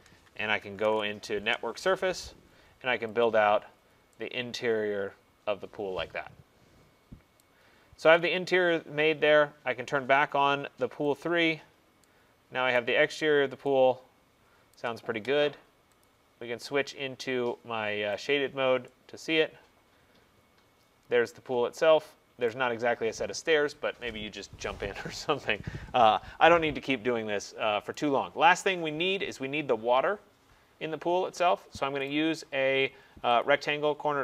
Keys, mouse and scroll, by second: 0.7 typing, 1.5 Return, 3.3 click, 6.2 typing, 7.4 right click, 8.2 click, 8.8 middle click, 11.2 click, 12.8 right click, 13.2 click, 14.8 right click, 16.1 click, 19.9 click, 22.6 right click, 28.0 right click, 28.3 middle click, 28.4 middle click, 32.1 right click, 33.5 click.